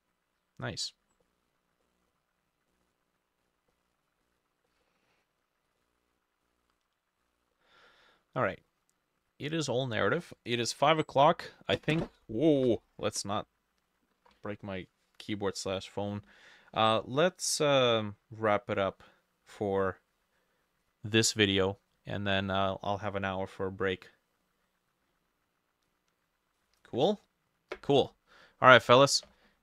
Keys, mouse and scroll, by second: 1.3 middle click, 2.7 middle click, 3.4-3.7 scroll down 1, 3.7 middle click, 4.3 middle click, 4.7 middle click, 5.8 middle click, 7.9 middle click, 8.5 middle click.